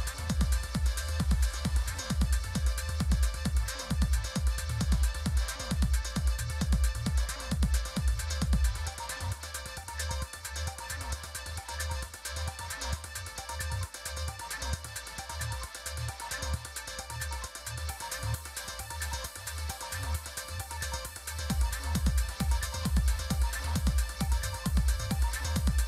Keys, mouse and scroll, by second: 1.5 click, 6.9 click, 9.4 click, 11.4 click, 17.1 click, 20.1-23.0 drag, 23.8 click.